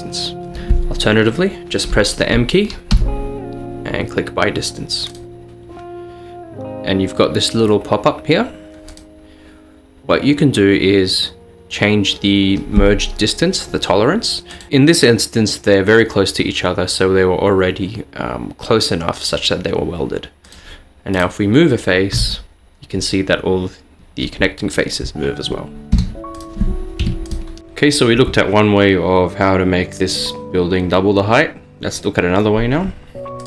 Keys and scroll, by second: 3.0 m, 22.2 g, 26.0 Escape, 27.1 Tab.